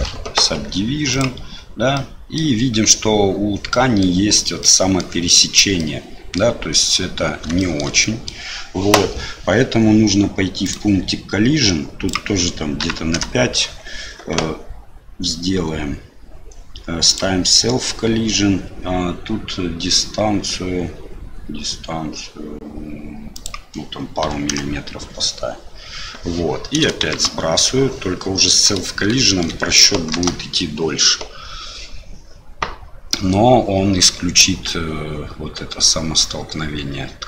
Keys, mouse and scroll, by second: 0.5 q, 1.9 middle click, 3.7 middle click, 4.6 middle click, 5.8 middle click, 7.6 shift+middle click, 8.0 middle click, 12.2-13.7 drag, 23.3-25.0 drag, 27.1 shift+Left, 29.2 shift+click, 31.8 space.